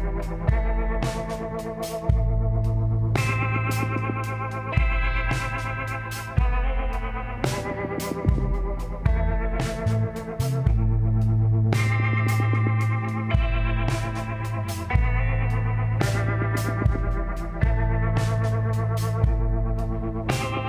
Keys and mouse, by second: 2.7-4.5 drag, 3.5 l, 5.0 s, 10.0 s, 12.4-15.8 drag, 15.6 e, 19.9-20.6 middle drag.